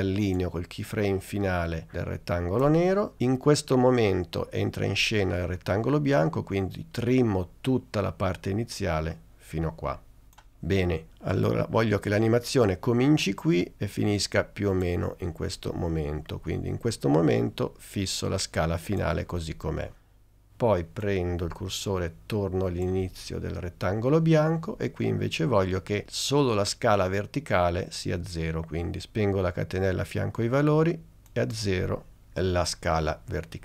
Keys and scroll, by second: 32.2 0.